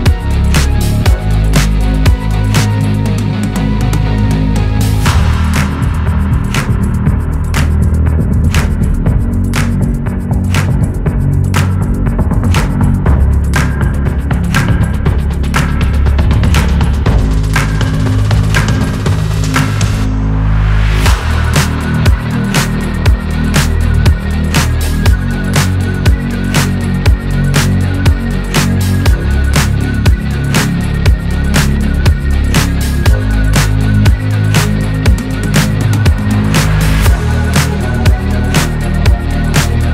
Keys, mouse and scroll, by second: 0.2 shift+0, 2.7 click, 4.6-5.5 shift+drag, 6.2 ctrl+z, 7.2-7.8 shift+click, 9.4-10.8 alt+scroll down 1, 12.2-13.6 scroll up 1, 14.1-14.6 alt+scroll up 1, 14.9-15.2 scroll down 1, 15.6-16.0 alt+scroll up 1, 17.0 click, 19.9 click, 25.0-26.8 scroll down 1, 27.2 scroll up 1, 30.4 click, 32.2-32.8 shift+drag, 38.0-39.6 drag.